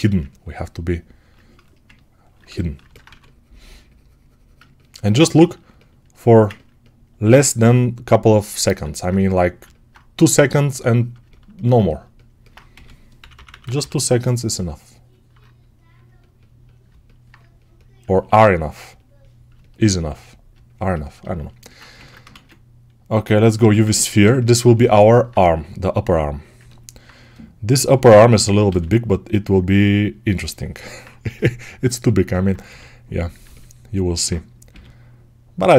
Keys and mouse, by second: 2.9 2, 7.5 g, 12.6 g, 13.0 ], 13.2 ], 21.8 ctrl+Tab, 21.8-28.5 ctrl+shift+right drag, 22.2 shift+a, 23.4 Tab, 27.8 s, 28.5-30.2 middle drag, 28.5 g, 30.2-32.1 alt+drag, 31.1 s, 32.1-35.7 alt+middle drag, 32.5 g.